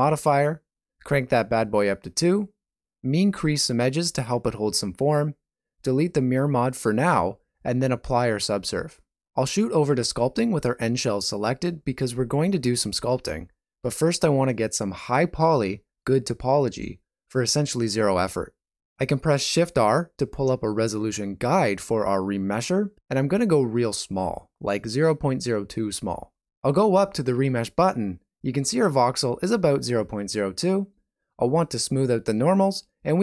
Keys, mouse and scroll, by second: 1.2 click, 1.7 shift+z, 2.7 click, 3.2 ctrl+middle click, 4.9 click, 6.2 alt+a, 6.6 Tab, 9.7 ctrl+a.